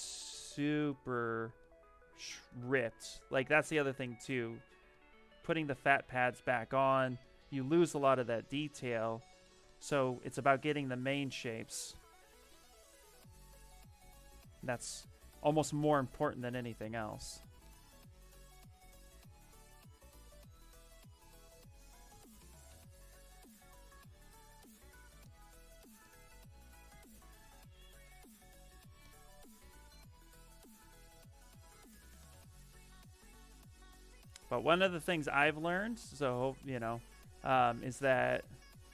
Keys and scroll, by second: 10.2 s, 28.0 s.